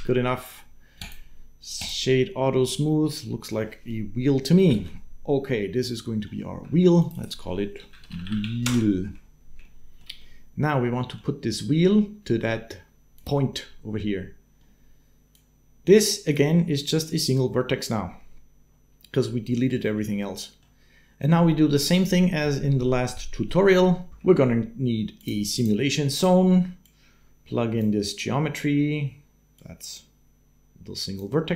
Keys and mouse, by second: 0.9 click, 2.5-4.6 middle drag, 4.6 ctrl+space, 6.9-8.4 drag, 8.0 e, 9.4 shift+middle click, 10.0 middle click, 15.1-16.5 drag, 20.0 click, 24.1 shift+a, 26.6 click, 26.9 click, 29.6-31.0 drag, 31.4 click.